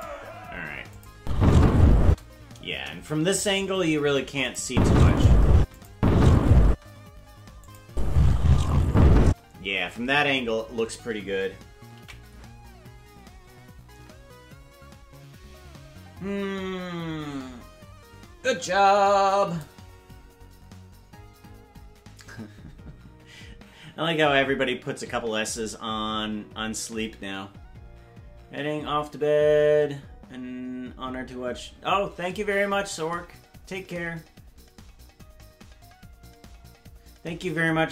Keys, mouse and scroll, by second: 1.0 click, 1.1 space, 2.1 space, 2.7 KP_0, 4.5 click, 4.7 space, 5.6 space, 5.8 click, 6.7 space, 7.7 click, 7.8 space, 9.3 space.